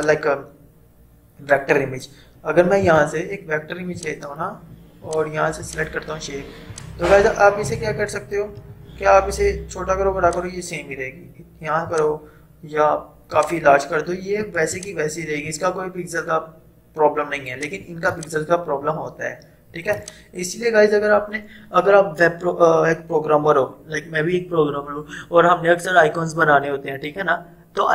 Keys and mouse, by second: 2.9 right click, 4.0 click, 7.2 click, 8.6 v, 10.3-13.5 drag, 17.6-23.6 drag.